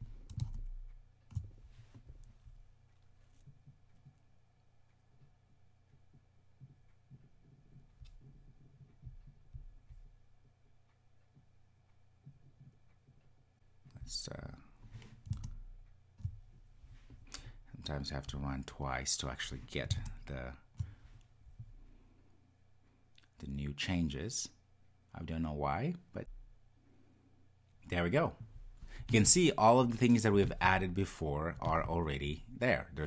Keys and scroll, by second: 14.3 super+\, 18.3 ctrl+r, 26.2 ctrl+r.